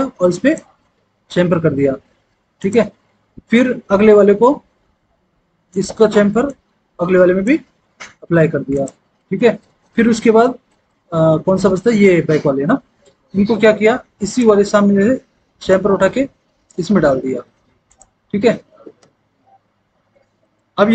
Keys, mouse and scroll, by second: 19.3 F4.